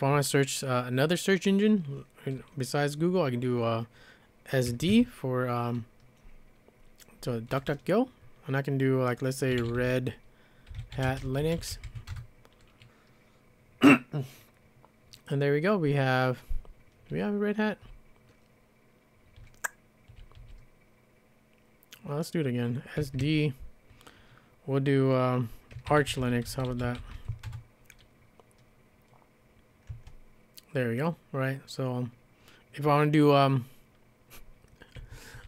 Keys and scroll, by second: 4.4-5.4 typing, 9.3-12.9 typing, 17.1 j, 17.6 j, 17.7 j, 18.0 j, 19.4-20.0 j, 20.3 j, 20.6 j, 22.8-23.7 typing, 25.5-27.6 typing, 29.7-30.4 typing, 35.0-35.4 typing.